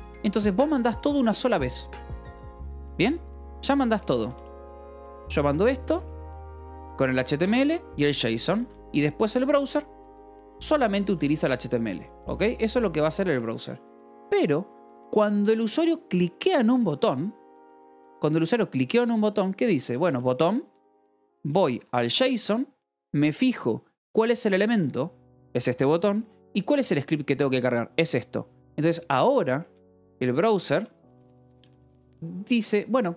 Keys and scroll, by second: 0.0-0.8 typing, 3.5-6.8 typing, 8.4 a, 8.5 space, 9.9-13.5 typing, 17.8 o, 18.1 Return, 19.3-22.9 typing, 29.6-31.7 typing, 32.8-33.1 typing.